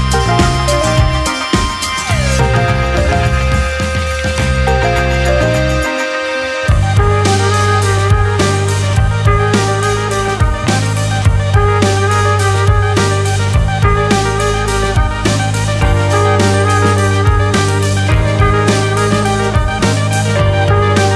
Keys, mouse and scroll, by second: 0.3 1, 0.8 alt+z, 1.1 click, 2.6 g, 4.5 Tab, 4.9 alt+z, 5.7 click, 6.0-6.8 middle drag, 6.8-7.3 scroll down 1, 7.3-10.3 middle drag, 10.3 shift+a, 14.2-18.1 drag, 18.1 Tab, 18.5-20.2 middle drag, 20.2-20.6 scroll up 3, 20.6 middle click.